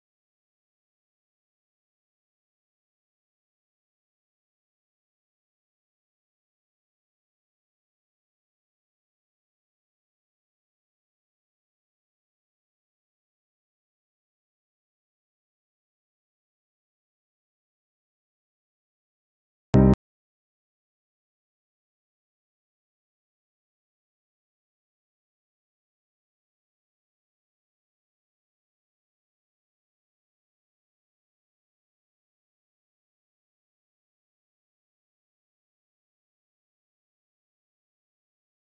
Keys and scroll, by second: 15.5 F3, 17.2 Delete, 19.5 Delete, 22.2 Delete, 25.7 shift+F2, 26.1 Escape, 32.7 shift+F2, 33.0 Escape.